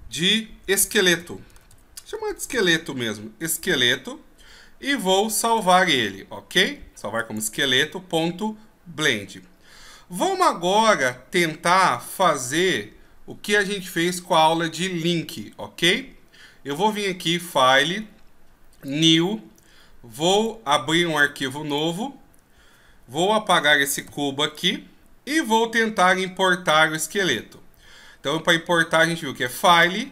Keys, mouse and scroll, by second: 7.4 click, 17.4 click.